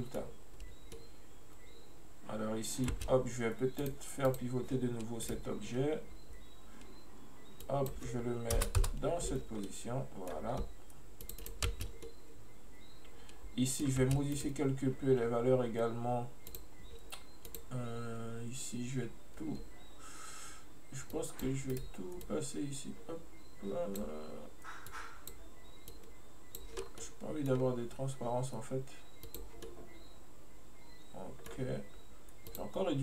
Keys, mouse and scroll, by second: 1.0-3.0 middle drag, 3.0 space, 3.9 click, 4.4 click, 5.4-6.4 right drag, 7.7-9.7 drag, 9.7-11.3 middle drag, 11.3 click, 11.8 space, 12.1-14.1 middle drag, 14.1 space, 14.4 right click, 15.0-16.6 scroll down 2, 16.6 click, 17.5-20.5 drag, 21.2 click, 22.3-26.9 drag, 26.9 scroll down 1, 27.1-27.6 middle drag, 27.6-28.4 scroll up 2, 29.3 click, 29.7-32.5 middle drag, 32.5 click.